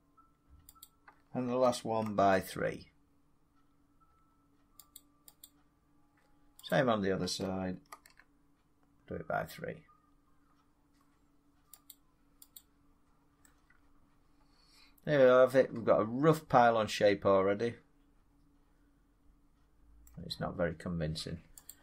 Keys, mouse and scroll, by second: 0.7 click, 2.0 ctrl+r, 2.6 middle click, 4.1 middle click, 4.9 click, 5.3 click, 6.6 click, 7.8 ctrl+r, 8.7 middle click, 8.8 scroll, 10.1 scroll, 11.8 click, 12.5 click, 15.3-17.5 drag, 19.9-21.6 middle drag, 21.6 click.